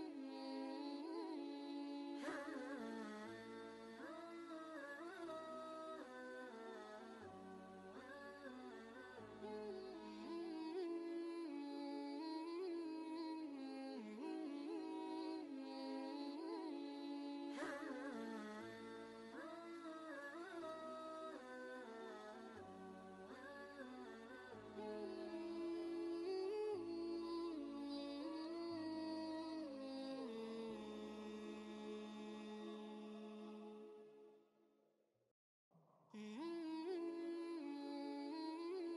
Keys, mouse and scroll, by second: 1.8 ctrl+space, 2.0 ctrl+click, 2.3 ctrl+space, 3.7 click, 9.8 t, 10.8 click, 12.0-14.6 typing, 14.8 ctrl+a, 15.9-19.1 typing, 21.3 ctrl+Return, 23.4-25.0 shift+drag, 25.0-29.3 shift+drag, 29.3 ctrl+space, 29.5 ctrl+click, 29.9 ctrl+space, 31.6 click, 33.5 scroll down 1, 35.7 click.